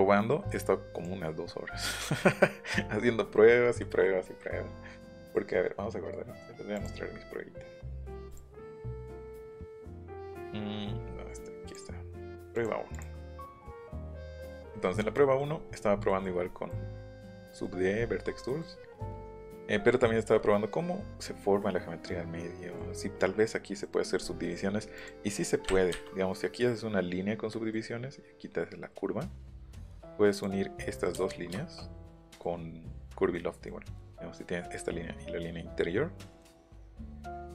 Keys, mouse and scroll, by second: 3.3 scroll down 1, 3.5 scroll up 1, 3.5 scroll down 1, 3.6 scroll up 1, 3.7 scroll down 1, 3.9 scroll up 1, 5.2 click, 6.7 click, 8.3 click, 9.1 click, 10.6 scroll down 1, 11.0 scroll up 1, 11.6 click, 12.9 click, 14.3 middle click, 16.7 middle click, 17.6 middle click, 18.0-18.4 scroll down 1, 18.4 middle click, 18.8 scroll up 1, 19.8 middle click, 20.4 middle click, 21.6-22.7 middle drag, 23.8 middle click, 24.4 middle click, 24.9 click, 25.9 Delete, 26.0 middle click, 27.5 middle click, 29.6 middle click, 30.3 click, 31.2 Delete, 31.3 middle click, 31.8 middle click, 32.2 middle click, 33.3 middle click, 36.5 ctrl+z.